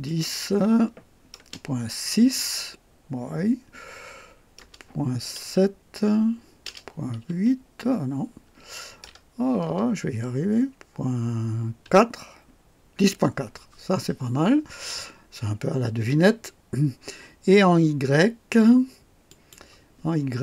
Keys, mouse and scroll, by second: 0.0 click, 1.4 BackSpace, 2.2 KP_6, 4.6 BackSpace, 5.3 KP_7, 6.6 BackSpace, 7.2 KP_9, 7.2 KP_8, 9.0 BackSpace, 9.6 BackSpace, 11.8 KP_4, 19.2 click, 20.3 scroll down 2.